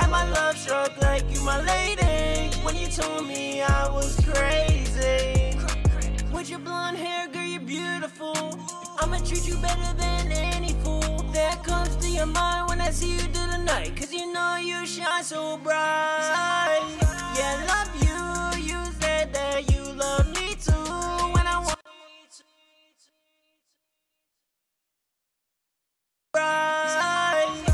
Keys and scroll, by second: 12.4 super+Tab, 17.7 super+Tab, 23.1 F4, 24.8 super+7.